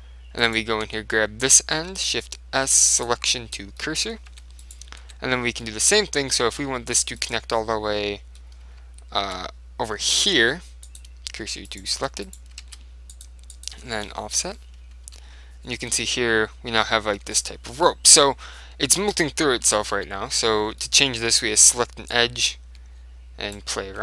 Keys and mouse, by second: 0.6-3.2 right drag, 1.0 Tab, 2.0 shift+s, 3.9-6.7 middle drag, 4.4 Tab, 4.7-6.4 right drag, 5.1 Tab, 7.3 middle click, 7.3-8.9 right drag, 7.7-8.8 middle drag, 8.9 shift+s, 9.1 right click, 10.2 shift+s, 11.6 Tab, 11.8-14.0 right drag, 12.1 Tab, 12.7 shift+s, 15.2 KP_7, 15.9 Tab, 16.0 middle click, 16.2 middle click, 17.3 Tab, 18.2 KP_7, 19.2-20.9 right drag, 19.6 z, 20.0 z, 21.0 middle click, 22.2 click, 22.2 middle click.